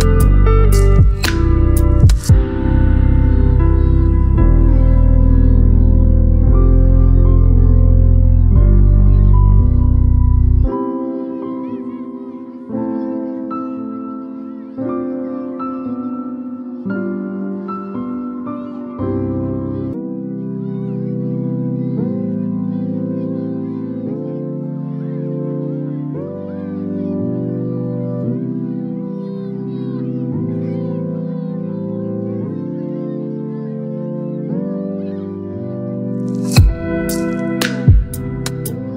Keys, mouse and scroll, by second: 2.2-10.2 ctrl+drag, 17.4 click, 17.5 ctrl+0, 30.7 click, 35.3 right click, 36.2 click, 38.4 alt+scroll up 1.